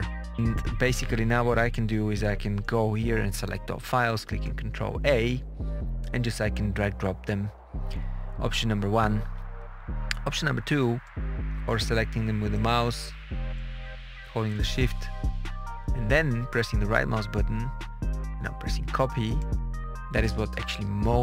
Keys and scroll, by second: 4.2 ctrl+a.